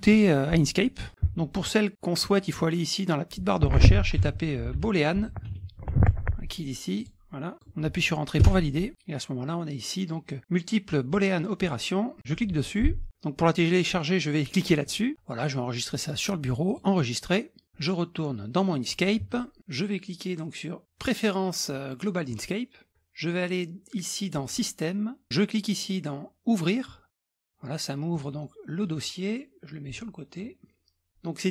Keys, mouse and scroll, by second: 0.8-1.3 scroll up 3, 2.3 click, 4.0-6.0 typing, 7.0-8.0 drag, 8.4 KP_Enter, 12.2 click, 14.9 click, 16.7 click, 17.6 alt+Tab, 18.8 alt+click, 22.3 click, 24.5 click, 27.1 click, 28.2 click, 28.8-30.8 drag.